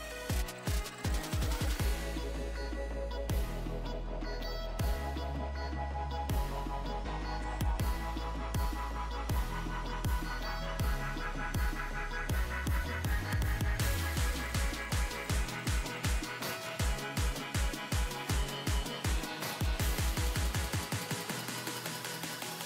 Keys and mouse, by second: 0.8 click, 1.3-2.5 shift+middle drag, 5.2-7.0 middle drag, 7.0-9.8 drag, 8.2 a, 12.5 ctrl+e, 13.1-14.9 drag, 15.8 click, 16.3 Tab, 17.8 KP_1, 19.3 shift+space.